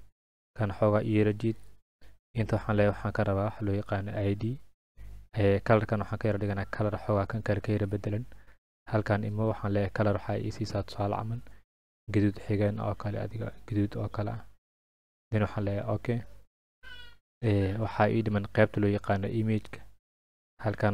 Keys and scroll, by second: 3.7-4.5 typing, 7.4 ctrl+a.